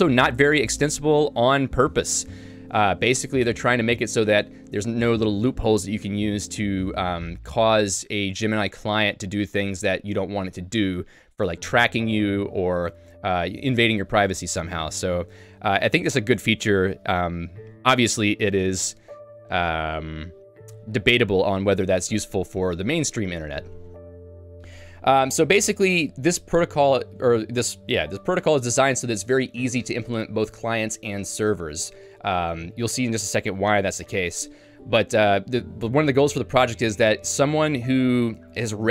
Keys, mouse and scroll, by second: 19.6 k.